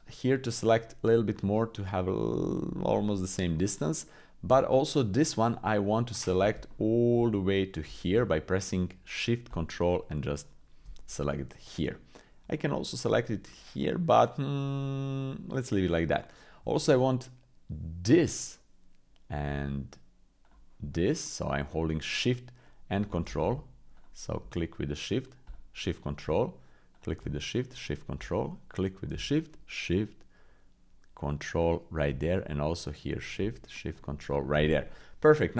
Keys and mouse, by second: 0.7-2.6 shift+drag, 4.0 click, 5.1 shift+click, 6.7 shift+click, 7.3 click, 11.9 click, 15.2 click, 18.0 shift+click, 20.4-22.6 ctrl+shift+drag, 23.2 ctrl+z, 25.4 ctrl+shift+click, 26.9 shift+click, 27.6 ctrl+shift+click, 31.6 ctrl+shift+click, 35.3 click.